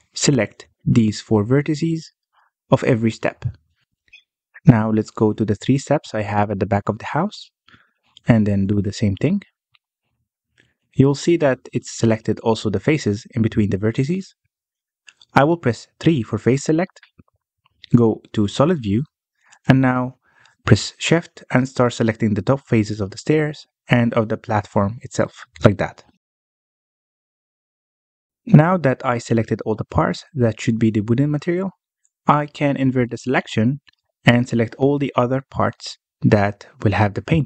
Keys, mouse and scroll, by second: 0.3 scroll up 2, 0.5 shift+middle click, 0.8-1.1 scroll up 1, 1.1 b, 1.7 b, 2.3 b, 3.6-3.9 scroll down 2, 3.9-5.6 middle drag, 5.6-6.0 scroll up 1, 6.0 shift+middle click, 6.5 b, 7.5 b, 8.3 shift+middle click, 8.8 b, 9.8 scroll down 1, 9.9-10.9 middle drag, 10.9-11.4 scroll up 1, 11.4 middle click, 12.1-12.6 scroll up 1, 12.6 b, 14.0 b, 14.8 b, 16.3-16.8 scroll down 2, 16.8 middle click, 17.6 3, 17.8 scroll up 2, 18.2 z, 19.3 3, 20.1 shift+click, 20.8 shift+click, 21.8 shift+middle click, 22.0-22.9 scroll up 1, 22.9 shift+click, 23.4 scroll down 2, 23.6 middle click, 24.6-25.3 scroll up 1, 25.3 shift+click, 25.8 shift+click, 26.1-26.5 scroll down 1, 26.5-28.8 middle drag, 28.8-30.0 scroll up 1, 30.0-31.6 scroll down 1, 31.6-34.6 scroll up 1, 34.6 ctrl+i, 37.3 ctrl+i.